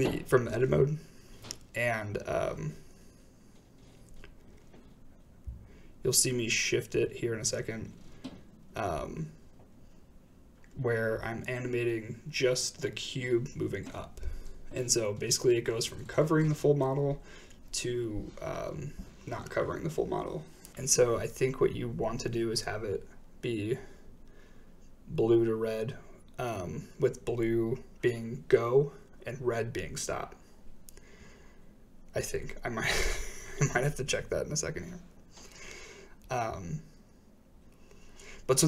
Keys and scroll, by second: 0.1 typing, 0.3 Return, 1.7-2.4 typing, 21.4 i, 23.6 shift+Right, 25.9 g, 26.1 z, 30.6 i, 31.7 shift+space, 34.5 space, 35.8 space.